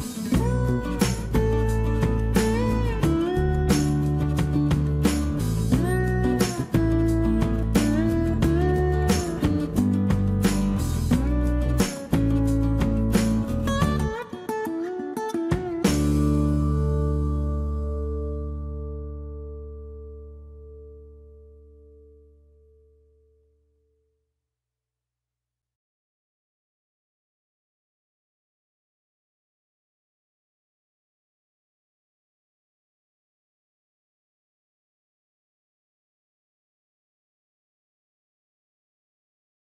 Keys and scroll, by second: 5.0 Escape, 5.5 e, 7.1 space, 8.2 m, 10.8-11.9 typing, 17.4 shift+t, 22.5 shift+Escape, 25.5-26.5 typing, 31.7-32.7 typing, 34.1-35.1 typing.